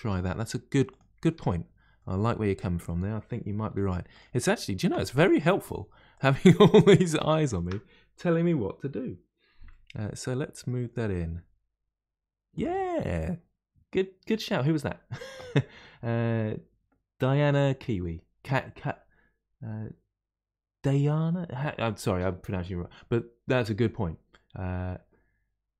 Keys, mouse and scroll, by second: 0.3-0.8 scroll up 1, 0.8 click, 1.3 Tab, 1.9-3.6 middle drag, 3.6 3, 4.1 click, 5.5 shift+click, 6.1 shift+click, 6.6 shift+click, 7.4 shift+click, 9.6-11.2 middle drag, 11.2 g, 12.9-15.9 middle drag.